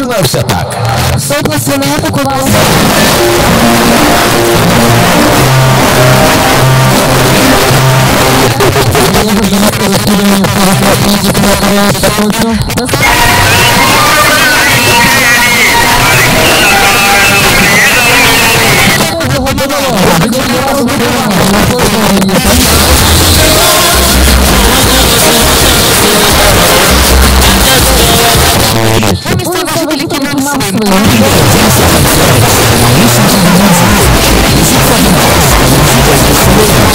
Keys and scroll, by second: 8.3 Page_Down, 19.0 Page_Down, 28.5 Page_Down.